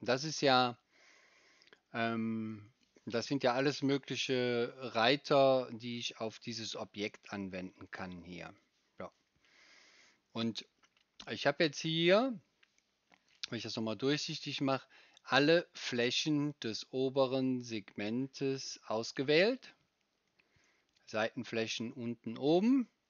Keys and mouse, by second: 13.3-23.0 right drag.